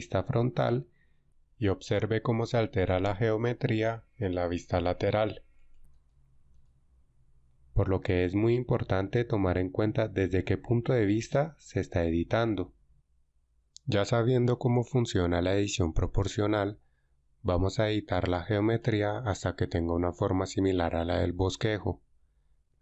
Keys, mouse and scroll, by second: 18.8-19.8 alt+right drag, 20.6 g.